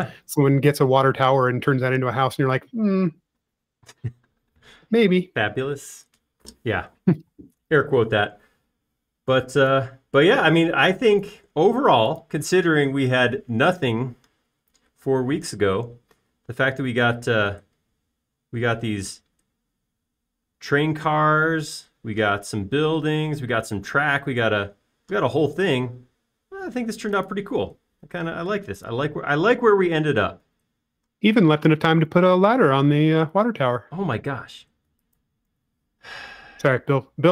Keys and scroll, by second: 35.6 m.